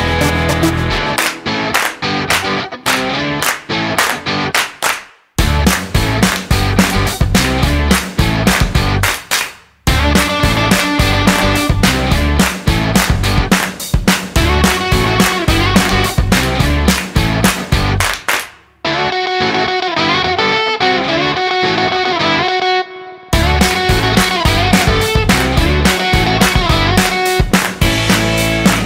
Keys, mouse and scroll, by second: 1.1 click, 2.8 click, 7.8 click, 23.2 click, 24.8 click.